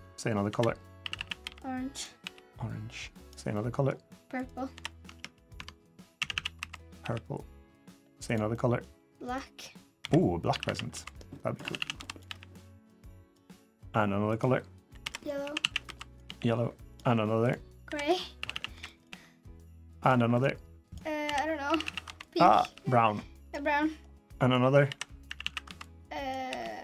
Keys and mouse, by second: 0.3-2.0 typing, 3.3 middle click, 4.2 click, 4.5 l, 4.9 Tab, 5.3 Tab, 6.0 a, 6.1 a, 6.3 b, 6.8 g, 8.3 middle click, 9.0 click, 9.8-12.0 typing, 13.3 click, 14.8-16.0 typing, 17.6-18.8 typing, 20.1 click, 21.0-22.4 typing, 23.5 click, 24.2 click, 24.6 l, 25.0 a, 25.2 a, 26.2 b, 26.2 g.